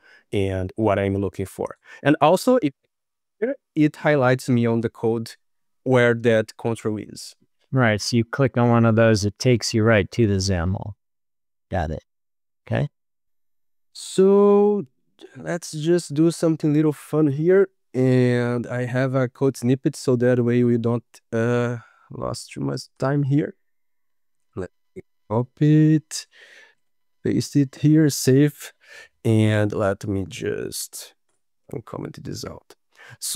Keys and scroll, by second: 25.7 ctrl+s, 27.2 ctrl+v, 27.8 ctrl+s.